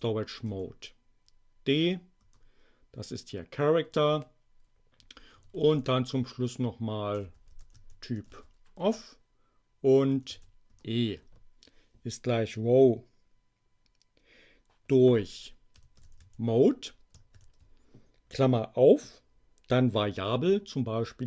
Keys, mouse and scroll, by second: 0.3 BackSpace, 0.4 d, 2.1 Return, 5.0 Up, 5.3 Left, 6.1-8.8 typing, 10.1 Delete, 10.2 e, 10.6 Return, 15.5-17.3 typing.